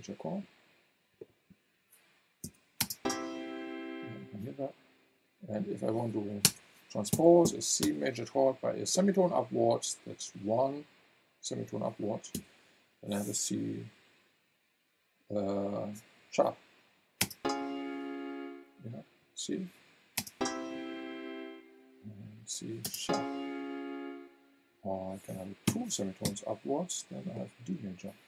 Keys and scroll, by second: 2.4 v, 2.8 space, 6.4 BackSpace, 7.1 KP_1, 7.8 Return, 12.3 v, 17.2 space, 20.2 space, 22.8 space, 25.7 KP_2, 26.2 Return.